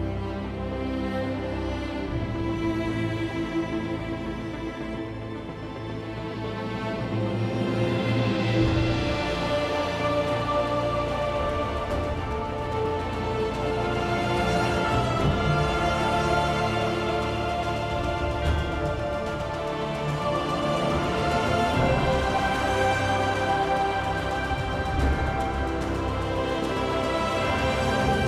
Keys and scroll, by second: 16.1 p, 17.7 End.